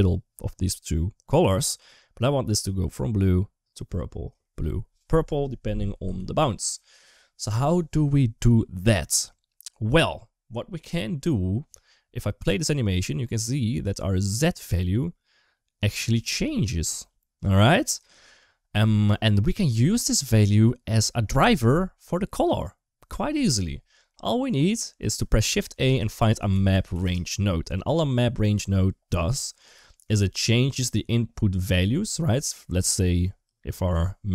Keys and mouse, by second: 2.0-5.3 drag, 6.0 ctrl+z, 12.5-16.0 drag, 24.0 middle click, 24.9 shift+a, 29.1 g, 29.7 middle click.